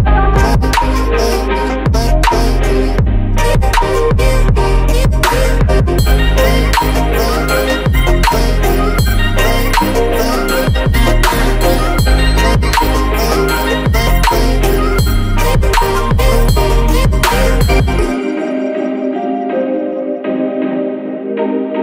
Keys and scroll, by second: 7.3 ctrl+[.